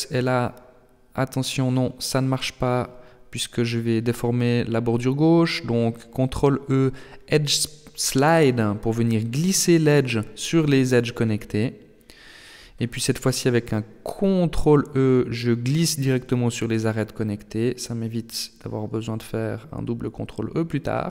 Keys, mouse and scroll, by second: 1.8 s, 5.4 alt+right click, 6.3 ctrl+e, 10.5 alt+right click, 11.5 ctrl+e, 14.2 ctrl+r, 17.2 ctrl+r.